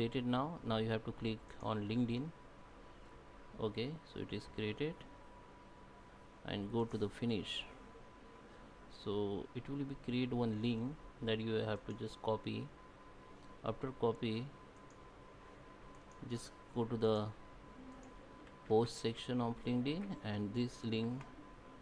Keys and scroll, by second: 18.6 ctrl+F8, 18.9 ctrl+?, 19.7 ctrl+F8, 19.9 ctrl+?.